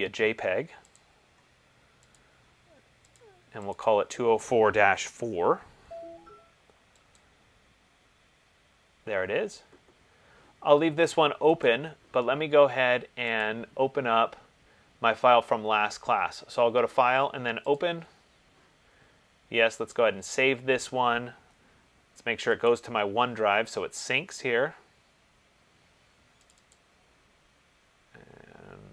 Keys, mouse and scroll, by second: 1.2 click, 2.3 click, 3.9 click, 5.1 BackSpace, 5.3 BackSpace, 7.3 click, 11.9 click, 13.6 click, 18.0 click, 20.2 click, 22.9 click, 26.7 click, 27.0 click.